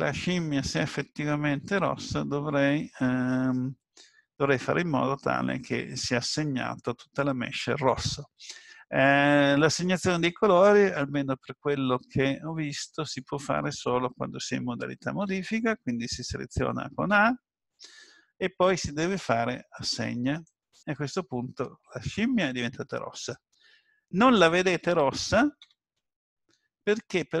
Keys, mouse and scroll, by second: 15.2 Tab, 17.1 a, 20.5 click, 25.6 Tab.